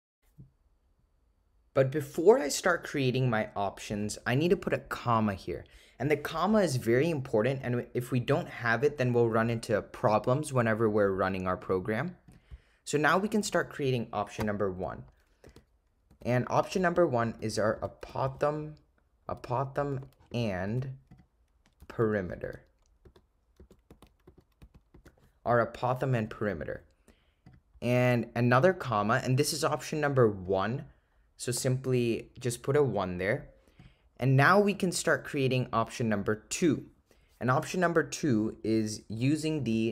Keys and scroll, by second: 5.2 ,, 16.2-18.4 typing, 19.5 0, 21.2 0, 21.9 8, 22.5 *, 23.7 /, 24.3 4, 25.0 *, 28.6 ,, 30.5 1, 33.9 ,.